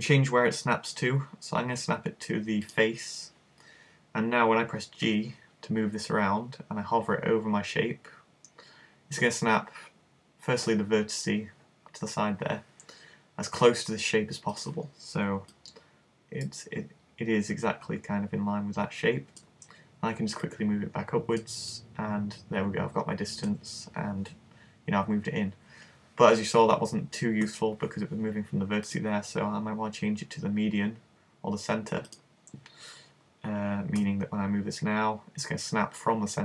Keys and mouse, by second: 5.1 g, 14.7 click, 16.5 middle click, 20.5 click, 22.4 middle click, 29.1 click, 34.0 g.